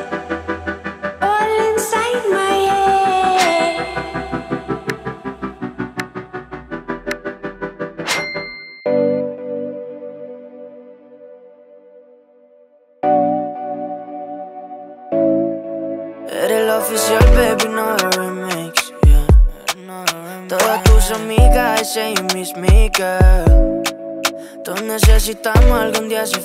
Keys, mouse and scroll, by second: 0.3 scroll down 1, 0.8-2.1 middle drag, 2.5 click, 3.2-3.9 middle click, 4.1-5.3 scroll down 1, 5.3-8.3 drag, 8.3-9.0 scroll up 1, 9.0-10.0 middle drag, 10.9-14.7 drag, 14.7-15.2 scroll down 1, 15.2-15.9 middle click, 16.2 click, 16.6-17.1 scroll down 1, 17.1-17.7 middle click, 18.3-22.7 drag.